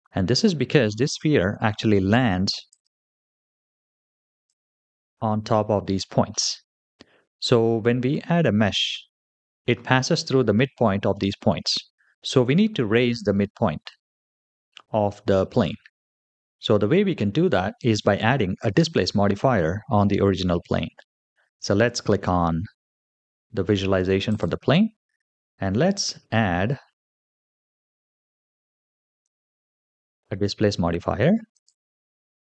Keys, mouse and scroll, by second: 2.6 click, 4.3 click, 6.2-7.3 middle drag, 7.6-9.2 scroll down 3, 18.3-21.5 scroll down 3, 24.2 click, 26.0-27.3 scroll down 5, 27.5 KP_3, 29.1 click, 29.8-30.5 scroll up 2, 31.4-32.5 drag.